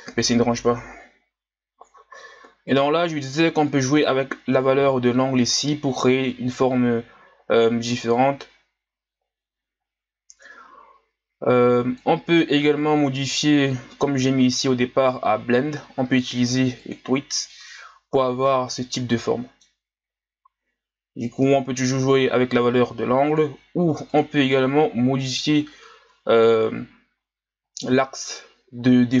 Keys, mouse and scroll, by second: 2.7-5.9 drag, 5.9-6.3 scroll down 4, 6.3-6.8 middle drag, 6.8-8.1 scroll up 1, 8.1-11.2 drag, 16.9 click, 17.5-21.3 middle drag, 21.3-25.2 drag, 25.2-25.9 middle drag, 25.9 scroll up 2, 27.3-29.2 ctrl+scroll up 1.